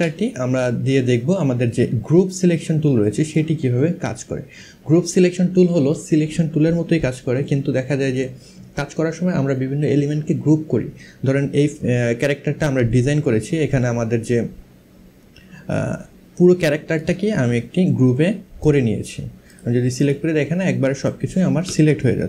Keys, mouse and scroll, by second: 1.5 click, 16.6 click, 18.2 click, 20.7 click, 22.1 ctrl+z.